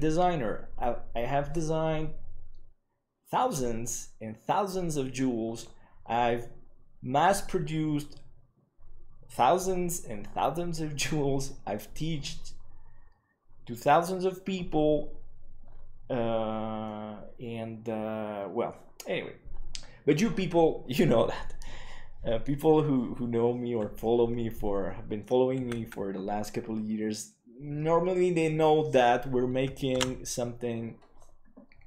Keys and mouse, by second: 16.8-17.7 middle drag, 25.5 KP_1, 30.1 ctrl+s.